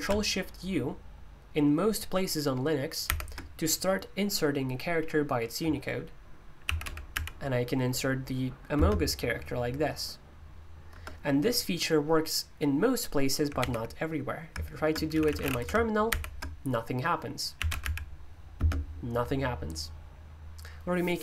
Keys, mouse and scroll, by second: 3.0 ctrl+u, 6.4-7.6 typing, 8.7 typing, 10.9 typing, 13.5 super+u, 14.9-15.9 typing, 16.0 ctrl+u, 17.3-18.5 typing.